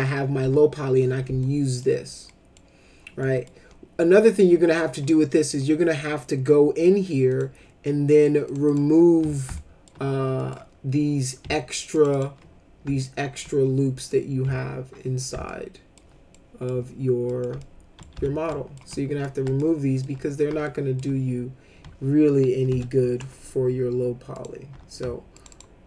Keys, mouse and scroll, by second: 0.4 F4, 1.4 middle click, 2.3 middle click, 3.2 middle click, 4.4-4.9 middle drag, 7.3 click, 8.4 click, 8.6 click, 9.5 alt+middle click, 10.4 middle click, 11.9 ctrl+click, 12.1 ctrl+click, 13.0 alt+middle click, 15.4 alt+middle click, 16.0 scroll down 2, 16.3 middle click, 16.7 scroll up 2, 17.3 middle click, 17.6 alt+middle click, 18.1 z, 18.5 alt+middle click, 19.2 middle click, 19.6 alt+middle click, 20.6 alt+middle click, 22.7 ctrl+BackSpace, 24.3 click, 25.3 ctrl+click, 25.5 ctrl+click.